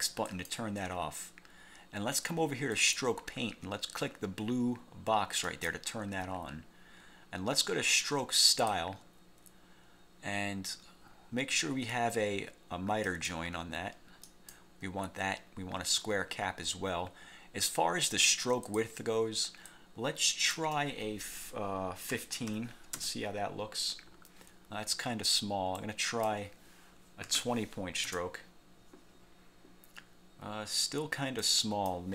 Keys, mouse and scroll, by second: 0.4 click, 2.9 click, 5.6 click, 8.6 click, 13.2 click, 14.4 click, 18.7 click, 19.8 click, 22.2 1, 22.6 5, 23.1 Return, 25.9 click, 27.4 2, 28.2 Return, 31.5 click.